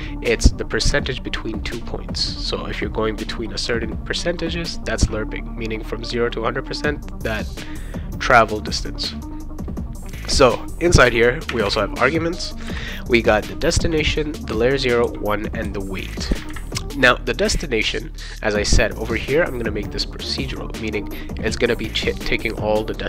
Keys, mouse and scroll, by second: 11.5 ,, 11.7 ,.